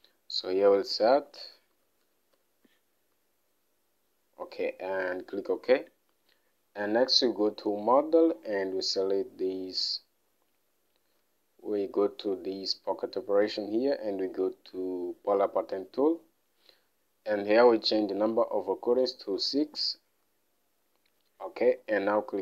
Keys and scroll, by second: 1.5-3.2 typing, 19.8 typing.